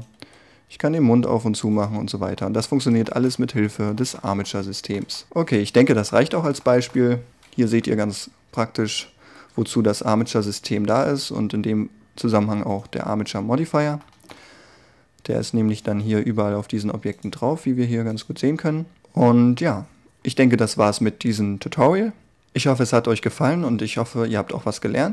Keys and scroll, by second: 0.2 g, 7.7 1, 10.7 g.